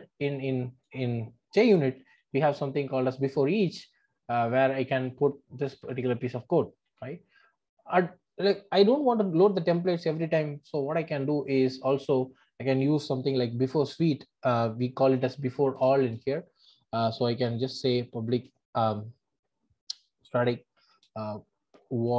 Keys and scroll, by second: 6.8 super+v, 10.7 super+x, 15.8 Return, 18.4 Return.